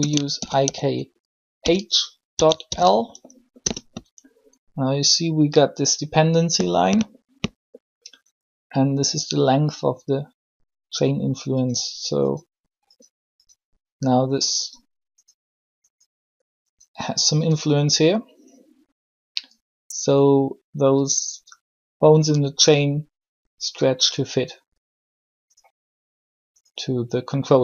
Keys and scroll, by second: 0.3 shift+i, 0.6 shift+k, 1.6 shift+h, 2.6 shift+l, 3.6 Return.